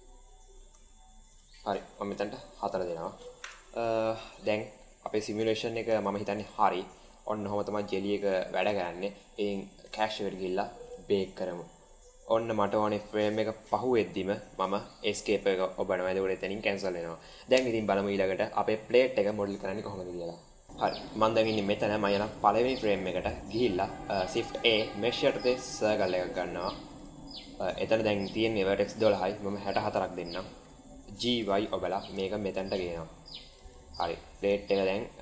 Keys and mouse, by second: 0.7 space, 1.2-2.6 drag, 3.5 shift+middle click, 5.3 click, 5.8 space, 8.7 space, 9.7 drag, 15.2 click, 22.2 click, 22.8 shift+middle drag, 24.3 shift+a, 28.8-30.4 drag, 31.1 g, 34.0 shift+middle click, 34.8 middle click.